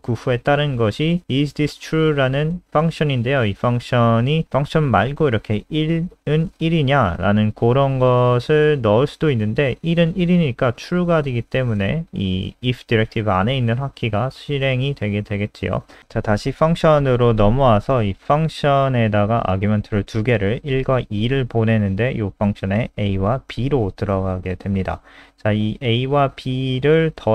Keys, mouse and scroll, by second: 3.7-5.3 typing, 7.6 click, 12.9 ctrl+z, 13.1 ctrl+z, 14.3 ctrl+z, 14.8 click, 15.1 ctrl+s, 16.0 click, 19.3-20.3 scroll down 1, 21.1 click, 22.3 ctrl+alt+r, 23.2 click.